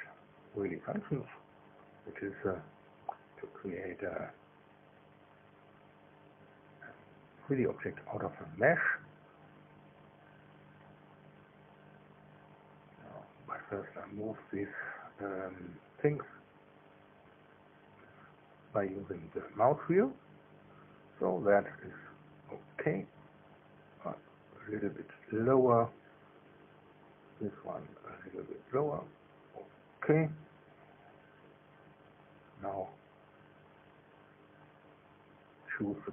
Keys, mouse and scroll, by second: 0.1 click, 1.1-4.0 middle drag, 9.1 click, 10.1 click, 13.4 click, 17.9-18.8 scroll down 2, 18.9-19.7 scroll down 1, 19.8-20.3 scroll down 1, 26.5 click, 28.2 middle click, 29.3 middle click, 31.4-35.7 drag.